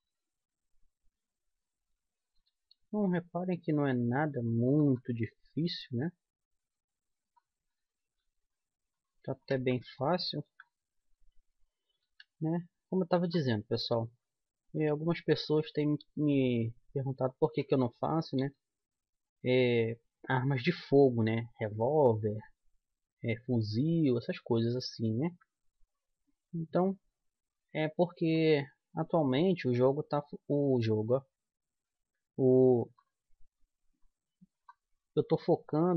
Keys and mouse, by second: 0.5 g, 1.9 middle click, 2.8 g, 4.0 click, 6.0-8.0 drag, 6.2 g, 8.1-9.8 drag, 8.4 g, 9.8 right click, 10.0 middle click, 10.6 middle click, 10.8 middle click, 11.4 click, 12.1-13.3 right drag, 12.4 g, 14.1-15.9 right drag, 14.3 g, 16.2-17.9 right drag, 16.4 g, 18.5-20.3 right drag, 18.8 g, 23.0 middle click, 23.4 middle click, 23.6 middle click, 25.2 click, 25.2-27.8 middle drag, 25.6-27.9 right drag, 27.4-29.2 drag, 30.1-31.8 right drag, 30.7-31.8 drag, 31.8 middle click, 31.9-33.7 drag, 33.3 right click, 33.7 middle click, 33.9-35.0 right drag, 34.0-35.0 drag, 35.0 middle click, 35.2 click, 35.7 right click, 35.8-35.9 middle drag.